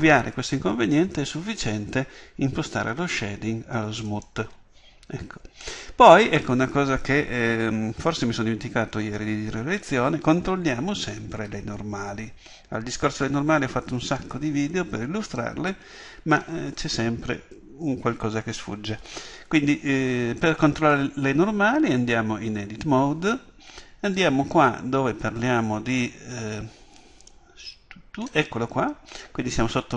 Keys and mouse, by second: 4.1-17.7 drag, 17.7 Tab, 24.1-29.9 drag.